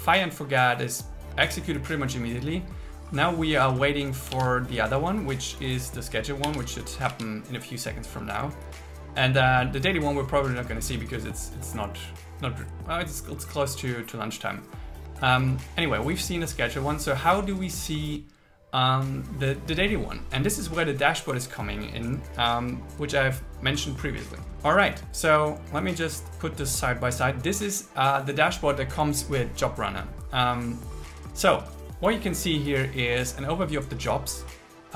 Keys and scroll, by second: 4.5 super+1, 6.5 super+1, 7.1 super+1.